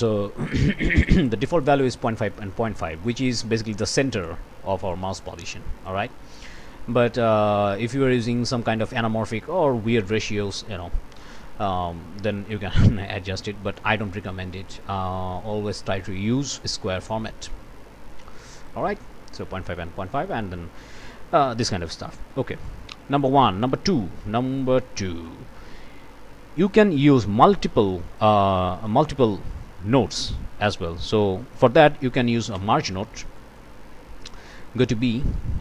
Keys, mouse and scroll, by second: 4.9-6.1 drag, 7.9 click, 12.7-13.6 scroll up 4, 14.8-16.0 drag, 16.8-17.7 typing, 17.7 Return, 18.5 click, 21.9 click, 22.6 click, 23.7 Escape, 24.5 click, 25.2-26.9 drag, 27.1 click, 27.8 click, 28.8 click, 30.0 click, 31.0 click, 32.5 m, 33.3 click, 34.8 click.